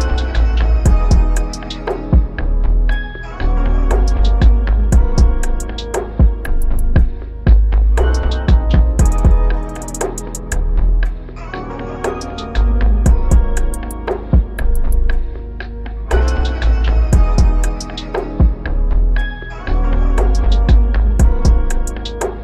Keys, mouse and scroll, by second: 5.7 ctrl+-, 6.3 ctrl+-, 14.2 ctrl+t, 15.3 alt+click, 19.1 ctrl+=, 19.4 ctrl+=, 19.9 ctrl+=, 20.8 Up, 21.7 Up.